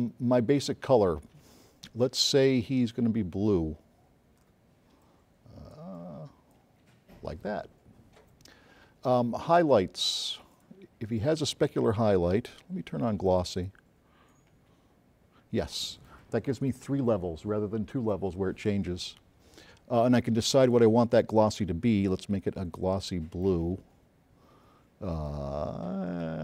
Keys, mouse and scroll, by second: 0.4 click, 2.6-3.0 drag, 5.1-5.8 drag, 9.5 click, 10.6 click, 13.6 click, 20.7 click, 22.2 click, 25.3-26.4 drag.